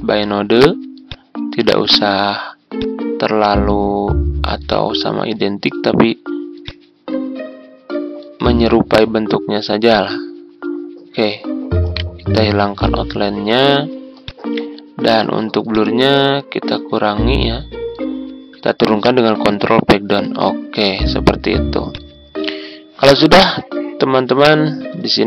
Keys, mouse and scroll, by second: 11.9 right click, 12.8-18.0 drag, 19.4 ctrl+Page_Down, 21.8-23.3 drag.